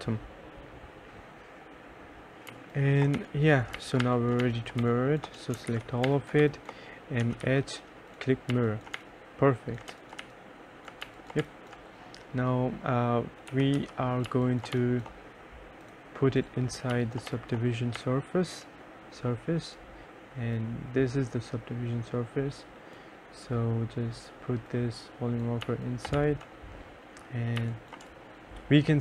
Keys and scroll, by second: 1.3 F9, 2.6-11.5 typing, 5.8 ctrl+a, 13.4-15.4 typing, 17.1 2, 17.4 1, 18.1 3, 25.8 2, 26.3 3, 27.8 2, 28.2 3.